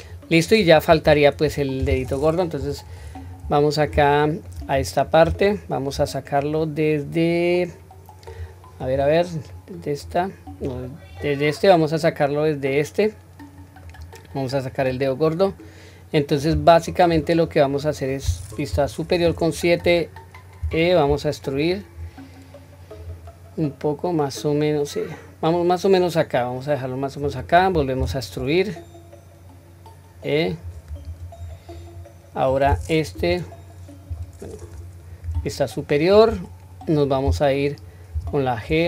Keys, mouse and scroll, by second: 0.0-0.4 middle drag, 1.0 Tab, 1.5-2.6 scroll down 1, 2.6 KP_7, 3.1-3.9 middle drag, 4.1-4.4 shift+middle drag, 4.7 scroll up 1, 5.2 scroll up 1, 5.4-5.9 shift+middle drag, 6.6-8.3 middle drag, 6.6-6.9 scroll down 1, 8.8 click, 9.5-10.0 middle drag, 10.6 click, 11.2-13.9 middle drag, 16.7-17.1 shift+middle drag, 17.4-17.8 scroll down 1, 17.9 middle click, 18.7 KP_7, 19.2-19.6 scroll up 3, 20.6 e, 31.0-31.7 scroll down 1, 31.7 middle click, 31.7-32.6 scroll down 1, 33.1 KP_1, 34.1 KP_7, 34.7 scroll up 1, 35.5 shift+middle click, 35.5 scroll up 2, 38.1 g.